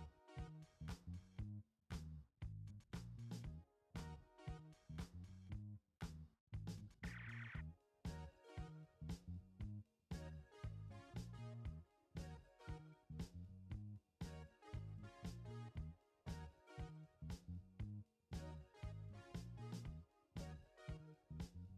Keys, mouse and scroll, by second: 1.8 click, 2.1 click, 4.3 alt+click, 12.8 shift+d, 14.4 shift+i, 14.8 shift+n, 15.3 shift+e, 18.0 click, 20.3 click.